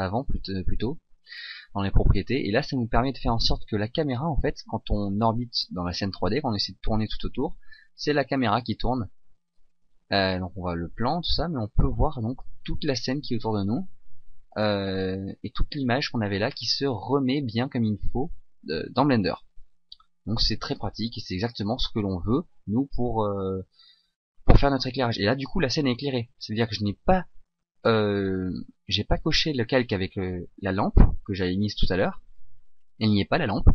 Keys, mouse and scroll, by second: 4.1 click, 4.1 n, 6.4 middle click, 12.0 middle click, 12.1 middle click, 12.3 middle click, 12.7 middle click, 13.6 middle click, 14.0 middle click, 14.8 middle click, 15.2 middle click, 15.6 middle click, 16.1 middle click, 17.2 middle click, 18.0 middle click, 18.8 middle click, 19.4 middle click, 19.6 middle click, 20.3-20.8 middle click, 20.5 middle click, 21.0 middle click, 21.3 middle click.